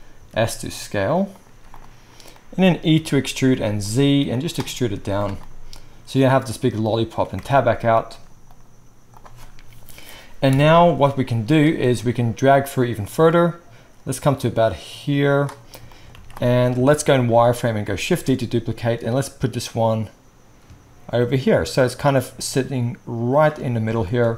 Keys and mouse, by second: 0.1 s, 1.5 z, 3.0 e, 4.9 z, 7.3 Tab, 8.4-12.8 right drag, 10.5 KP_1, 12.8-17.0 middle drag, 16.4 z, 18.1 shift+d, 22.0-23.4 shift+middle drag, 23.4-24.3 shift+right drag.